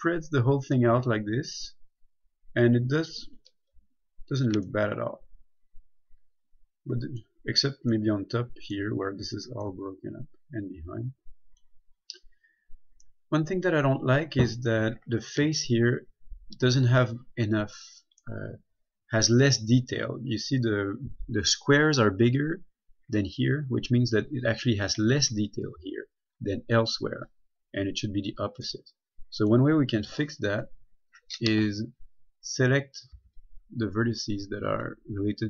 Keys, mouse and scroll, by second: 0.0 middle click, 1.6 scroll up 1, 1.9 middle click, 4.0 a, 4.4-4.9 scroll down 1, 4.9 middle click, 10.6 middle click, 12.5-13.0 scroll up 1, 13.2 scroll down 1, 13.4 middle click, 18.5 middle click, 28.9 middle click, 30.7-31.1 scroll up 1, 33.4 b, 33.6 click.